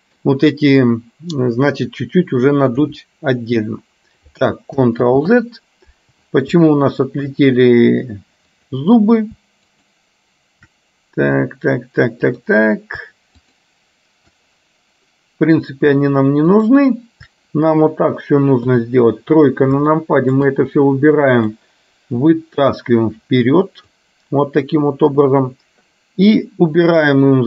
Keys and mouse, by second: 2.8 KP_1, 5.3 ctrl+z, 6.8 shift+middle click, 9.8 shift+click, 12.5 click, 13.5 shift+click, 16.6 shift+click, 18.6 KP_3, 20.0 middle click, 21.5 click, 22.4-24.0 drag, 26.9 click.